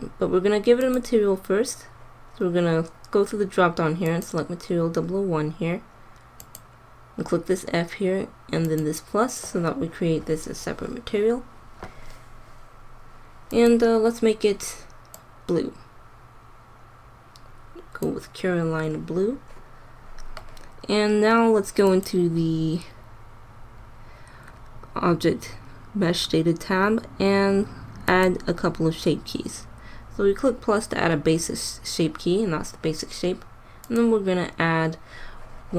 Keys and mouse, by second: 6.3-8.2 drag, 8.6-15.2 drag, 21.8-23.7 drag, 28.0-29.9 drag, 33.8-35.5 drag.